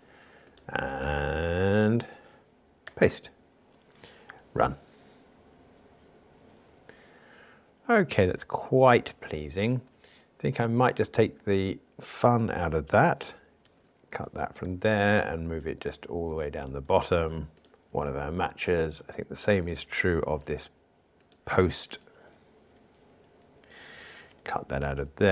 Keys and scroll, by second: 2.9 super+v, 4.4 ctrl+r, 13.6 super+x, 17.8 super+v, 24.3 super+x.